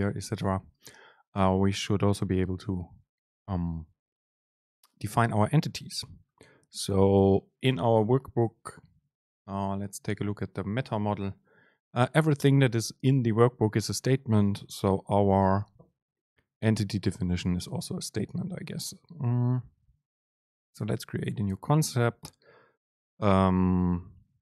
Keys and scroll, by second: 9.4 ctrl+alt+shift+s, 15.4 super+c.